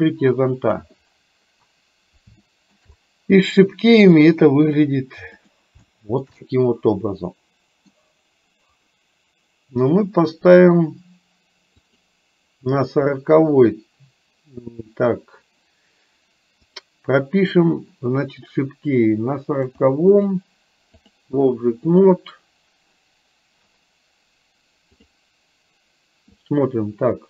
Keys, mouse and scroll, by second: 2.5 shift+middle click, 3.5 middle click, 5.4 click, 5.9 shift+middle click, 6.4-7.9 middle drag, 11.9 click, 16.7 click, 19.8 click, 21.9 click, 26.4-27.2 drag.